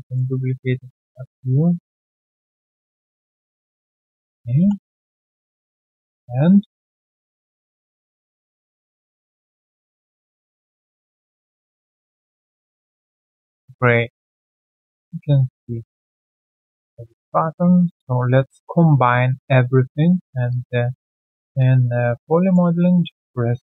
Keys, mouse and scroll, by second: 0.3 alt+click, 0.7 alt+middle click, 1.1 alt+click, 1.4 alt+right click, 2.1-3.3 typing, 2.7 middle click, 3.7 alt+middle click, 4.1 alt+right click, 4.3 alt+click, 4.5 alt+click, 4.7 alt+w, 4.8-6.1 typing, 6.0 alt+middle click, 6.2-6.6 scroll down 3, 7.5 d, 7.5-9.3 shift+scroll down 1, 9.8-12.8 typing, 11.9 alt+middle click, 12.6 scroll down 1, 13.0 alt+q, 13.3 alt+click, 14.8 alt+middle click, 15.0 alt+scroll down 1, 15.1 alt+click, 18.1 ctrl+alt+c, 22.3 alt+middle click.